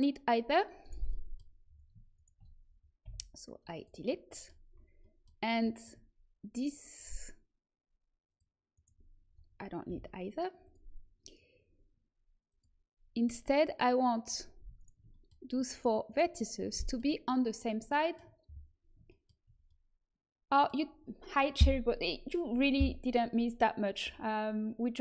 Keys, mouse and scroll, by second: 0.7-3.0 middle drag, 3.0 Delete, 6.5-9.8 drag, 8.7-9.8 right drag, 9.8 Delete, 11.9 middle click, 12.4-16.8 drag, 14.2-16.8 middle drag, 14.2-18.0 right drag, 17.7-25.0 middle drag.